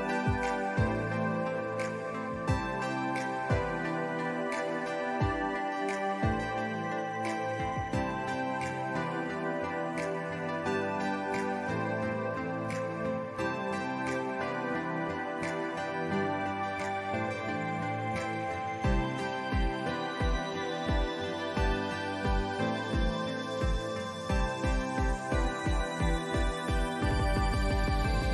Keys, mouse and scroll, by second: 0.2-0.8 alt+scroll up 3, 1.0 alt+scroll down 2, 2.2 scroll up 1, 2.7-3.7 scroll down 4, 3.7 alt+scroll up 1, 5.3 scroll up 1, 5.9 alt+scroll up 1, 7.1-8.2 drag, 8.2 ctrl+z, 9.0 click, 11.0 ctrl+z, 12.1 ctrl+s, 12.6-13.3 alt+scroll down 3, 13.8 click, 15.0 alt+scroll up 1, 16.1 click, 16.8 scroll down 1, 16.9 alt+scroll up 1, 17.5-17.9 alt+scroll down 2, 17.6 ctrl+z, 18.5 alt+scroll up 1, 18.8 scroll down 1, 18.9 scroll up 1, 19.2 alt+scroll down 1, 20.0-24.9 drag, 26.5 click, 26.7 scroll down 1, 27.3 space, 27.4 click, 27.6 space, 28.1-28.3 drag.